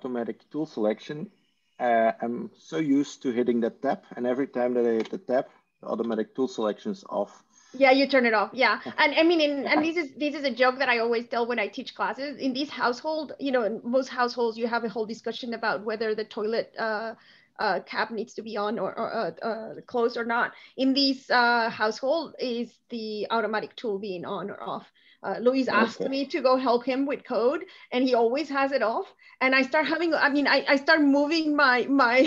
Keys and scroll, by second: 4.8 Tab, 6.6 Tab, 9.0 Tab.